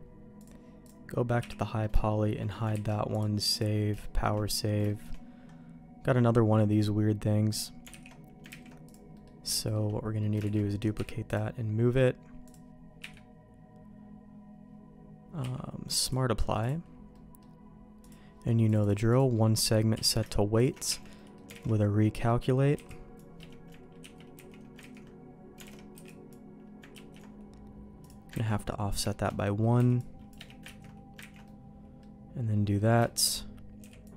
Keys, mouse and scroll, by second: 0.4 click, 0.4 h, 1.4 h, 1.6 middle click, 2.0 shift+middle click, 2.7 ctrl+s, 3.1 click, 4.0 shift+middle click, 4.4 middle click, 4.8 middle click, 8.0 alt+h, 8.5 ctrl+z, 8.8 click, 9.1 middle click, 9.5 shift+middle click, 10.2 middle click, 10.5 shift+d, 10.9 m, 13.0 q, 15.4 q, 17.1 middle click, 18.0 click, 18.6-19.6 drag, 19.9 q, 20.8 Tab, 21.1 middle click, 21.6 alt+a, 22.7 c, 24.0 ctrl+q, 24.3 ctrl+x, 25.0 ctrl+z, 25.6 alt+a, 25.9 b, 26.9 ctrl+q, 28.3 ctrl+x, 28.6 middle click, 29.0 shift+middle click, 29.7 c, 30.8 ctrl+q, 31.2 ctrl+x, 31.4 middle click, 32.7 middle click, 33.0 shift+middle click, 33.8 b.